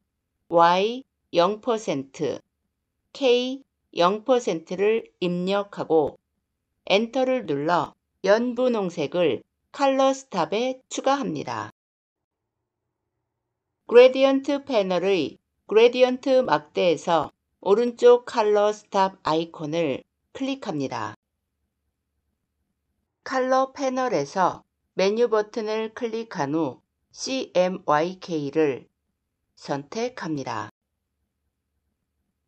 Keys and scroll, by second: 6.7 Return.